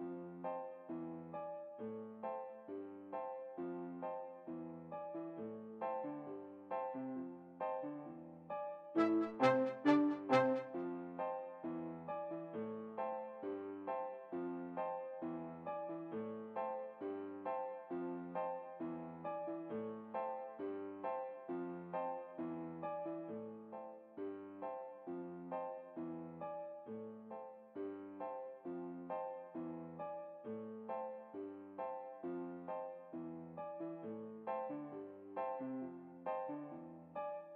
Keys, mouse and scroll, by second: 0.1 s, 4.0-5.5 right drag, 4.6 s, 5.9 s, 9.1-10.6 right drag, 9.3 s, 12.7-14.2 middle drag, 13.4 s, 17.0 s, 21.8-22.9 middle drag, 22.9 alt+a, 32.6 Escape, 33.6-34.3 scroll up 1, 34.3-35.9 middle drag, 34.9 click, 35.7 right click, 35.8 s.